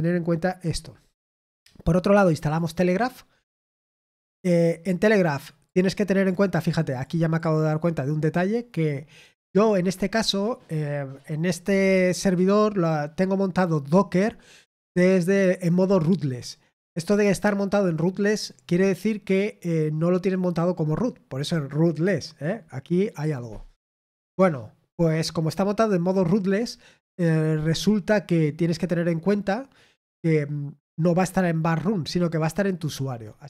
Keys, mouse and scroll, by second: 2.2 click, 5.6 click, 6.9-8.8 drag, 9.2 click.